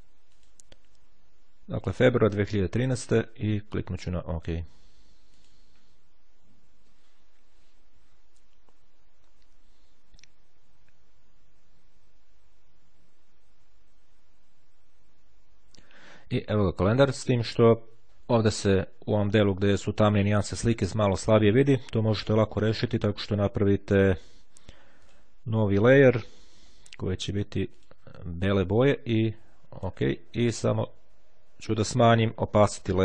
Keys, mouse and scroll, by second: 0.4 click, 4.5-6.0 drag, 24.3-25.7 drag, 27.5 click, 29.5-30.5 drag, 31.6-33.0 drag.